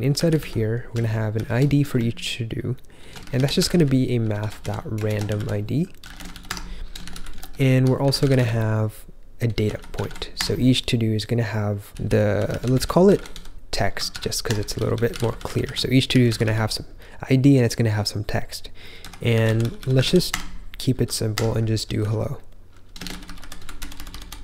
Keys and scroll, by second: 0.0-1.8 typing, 2.9-10.4 typing, 11.6-17.6 typing, 18.7-24.4 typing, 21.3 Escape.